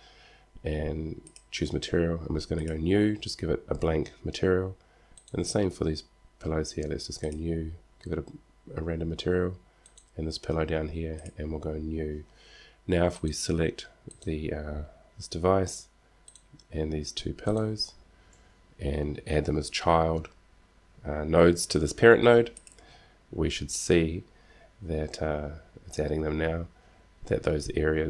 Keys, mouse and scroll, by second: 13.3 right click.